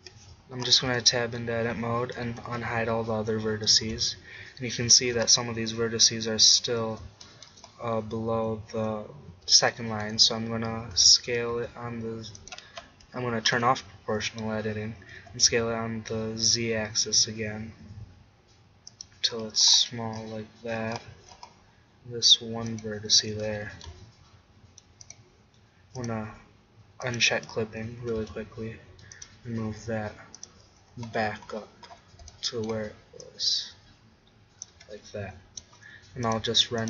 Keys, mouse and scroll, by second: 0.0 Escape, 0.8 Tab, 2.5 alt+h, 4.0 middle click, 10.9 s, 12.5-14.4 drag, 13.5 o, 15.2 s, 19.0-21.3 drag, 22.7-24.4 drag, 23.6 g, 25.1 click, 28.0-29.1 drag, 28.0 g, 29.2-30.8 drag, 34.7 Tab.